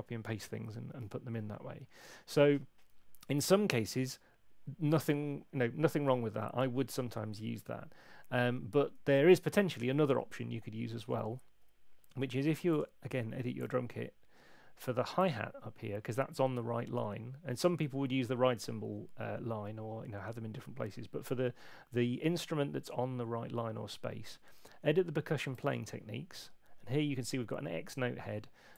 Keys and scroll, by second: 11.1 super+1.